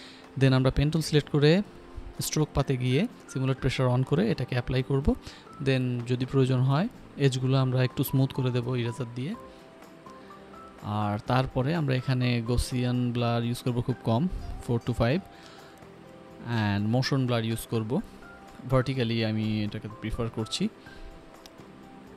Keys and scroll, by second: 0.7-1.6 typing, 3.4 p, 11.7 e, 18.1 5, 20.8 Escape.